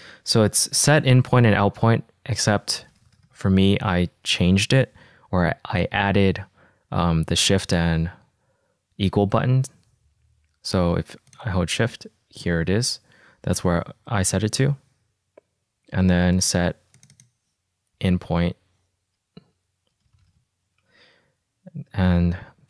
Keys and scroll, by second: 2.9-4.6 typing, 18.5 i, 20.4 space, 20.6 p.